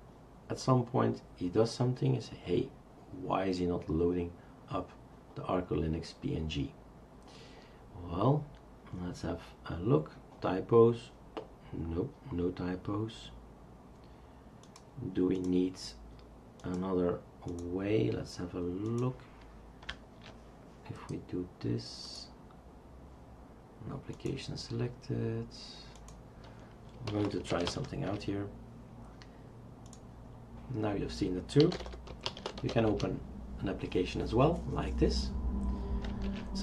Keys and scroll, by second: 26.7-28.6 typing, 31.4-33.2 typing, 36.3 shift+super+q.